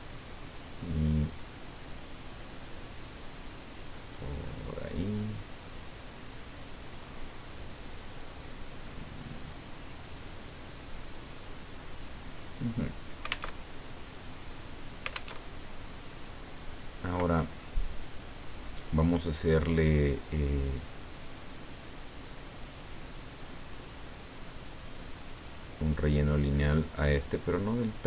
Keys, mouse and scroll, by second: 7.6-12.4 drag, 13.6 alt+Tab, 15.3 alt+Tab, 22.7 click, 25.3 click.